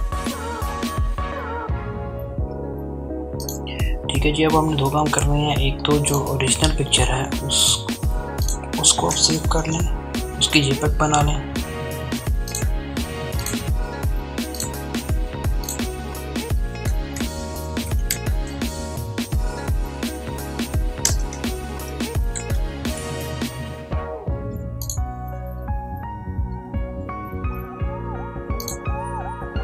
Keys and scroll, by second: 7.5 ctrl+shift+s, 14.7-16.8 typing, 19.0-20.7 typing.